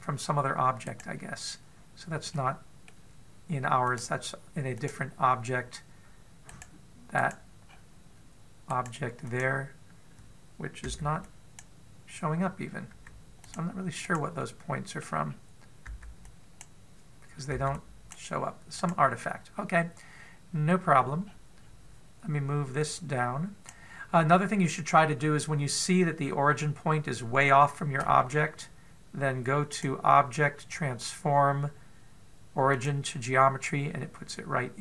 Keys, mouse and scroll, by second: 0.5 right click, 1.6 right click, 3.1 middle click, 4.6 click, 7.3 right click, 8.0 right click, 8.5-9.5 scroll up 3, 9.5 right click, 10.0 click, 11.7 b, 13.7 b, 14.9 right click, 15.2 middle click, 16.1-16.7 scroll down 2, 16.7 b, 18.4 b, 19.6 right click, 20.3 middle click, 21.7-22.7 scroll down 7, 23.7 click, 30.5 click, 33.8 click, 34.6-34.8 scroll up 2.